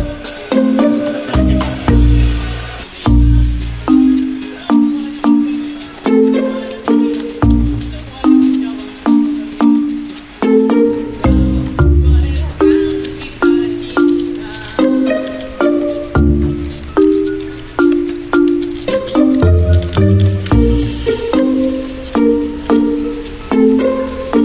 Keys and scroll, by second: 1.0 v, 11.2 v, 11.8 Escape, 12.1 v, 15.8 F9, 20.3 t, 21.8-24.4 typing.